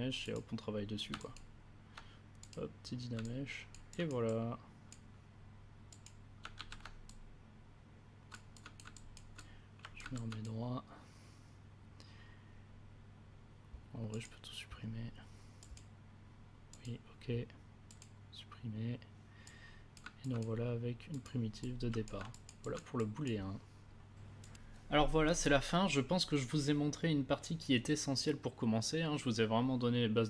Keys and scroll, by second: 6.5 ctrl+w.